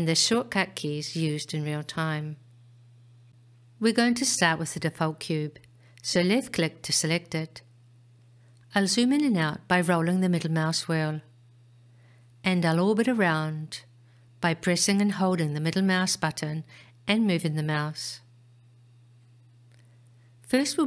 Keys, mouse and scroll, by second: 2.5-3.8 scroll up 2, 4.4-7.4 scroll up 1, 8.2 click, 9.7-10.9 scroll down 3, 10.9-12.1 scroll up 3, 12.1-13.2 scroll up 1, 13.3-16.6 middle drag.